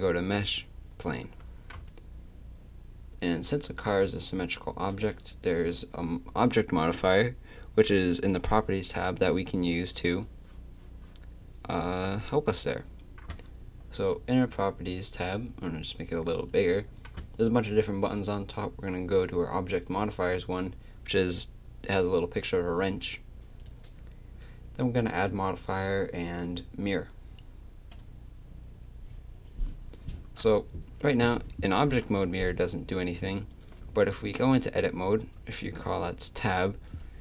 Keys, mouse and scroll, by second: 15.1-17.1 drag, 23.6-28.0 drag, 31.9 g, 35.4 Tab, 36.9-37.2 right drag.